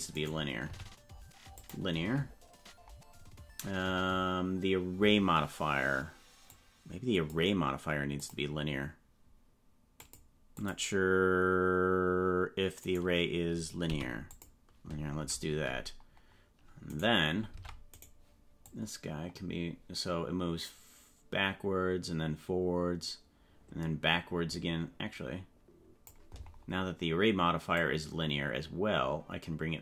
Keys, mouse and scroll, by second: 0.1 right click, 0.7 t, 6.4 click, 8.2 click, 10.0 click, 10.6 click, 12.8 right click, 13.8 t, 16.9 right click, 17.5 ctrl+Tab, 18.0 right click, 18.6-26.0 drag, 27.7-29.8 drag.